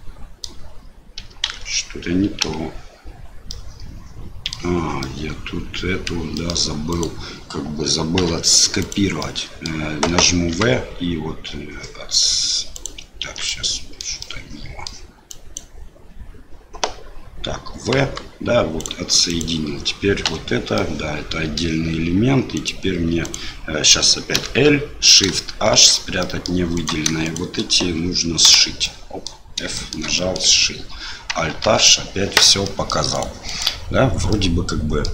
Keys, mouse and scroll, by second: 1.4 alt+a, 2.4 l, 3.6 middle click, 5.1 middle click, 6.4 middle click, 6.9 click, 8.2 2, 8.8 click, 9.2 middle click, 10.5 v, 13.2 ctrl+z, 13.4 middle click, 14.2 middle click, 15.3 click, 18.0 v, 19.3 click, 20.2 l, 20.7 middle click, 22.5 click, 23.2 click, 24.3 l, 25.7 shift+h, 26.2 middle click, 26.7 click, 27.2 shift+click, 28.4 f, 28.8 middle click, 29.7 shift+middle click, 30.2 middle click, 31.6 alt+h, 32.6 middle click, 33.1 click, 33.4 click, 34.3 middle click.